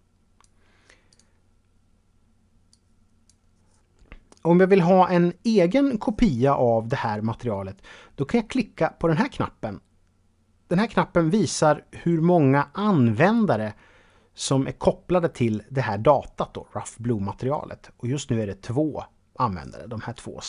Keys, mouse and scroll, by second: 1.1 click, 2.7 click.